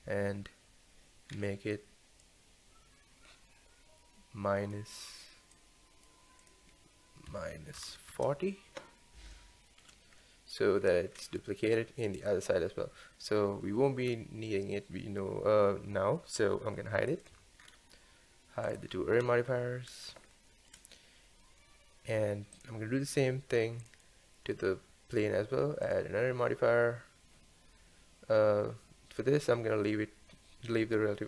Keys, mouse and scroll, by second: 1.3-2.2 scroll down 1, 2.2-9.3 drag, 9.3-10.8 shift+middle drag, 10.8-11.2 scroll up 1, 11.2-11.8 scroll down 1, 11.8-12.5 scroll down 1, 14.1-14.5 scroll down 1, 14.5-17.3 middle drag, 17.3-17.6 drag, 17.6-18.7 scroll up 6, 18.7 click, 19.1-20.3 scroll up 2, 20.3-22.5 shift+middle drag, 22.5 click, 23.8-27.8 drag.